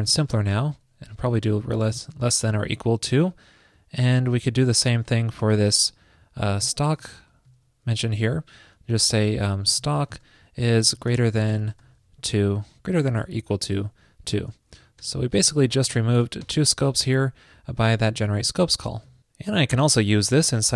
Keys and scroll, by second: 0.6 alt+Left, 7.7 super+Right, 8.4 alt+shift+Left, 14.7 shift+super+l, 19.1 super+s.